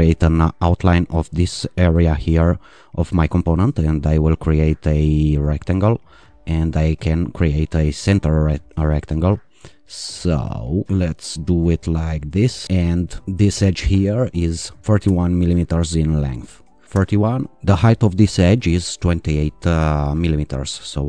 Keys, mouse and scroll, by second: 3.8 click, 6.2 click, 8.1 click, 10.0 click, 12.4 click, 13.1 right click, 13.4 click, 15.0 l, 17.0 Return, 18.0 click.